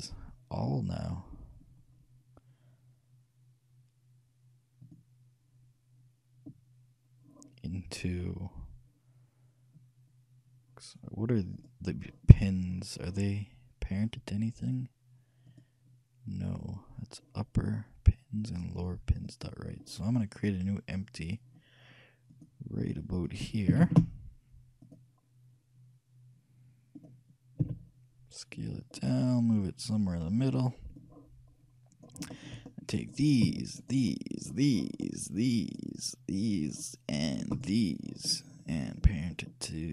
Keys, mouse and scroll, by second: 5.0-6.8 drag, 11.8-13.5 right drag, 13.6 right click, 15.7-21.4 right drag, 22.5-25.3 drag, 24.0 shift+a, 27.8 s, 31.1-32.9 drag, 33.2-39.4 right drag.